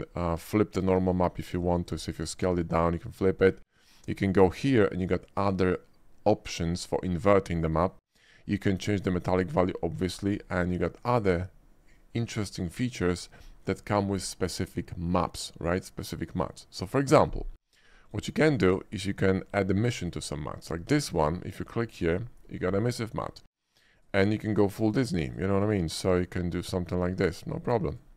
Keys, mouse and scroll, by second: 0.8 click, 1.6 click, 1.9 click, 2.4 click, 3.6 click, 4.3 click, 8.8-9.3 drag, 10.8-13.1 drag, 18.1 click, 20.1 click, 20.8 scroll up 1, 21.0 shift+middle drag, 21.4 shift+middle click, 22.1 shift+click, 23.1 shift+middle click, 24.0 click, 24.8 click, 25.3 click, 26.0 click, 27.0 click, 27.9 click.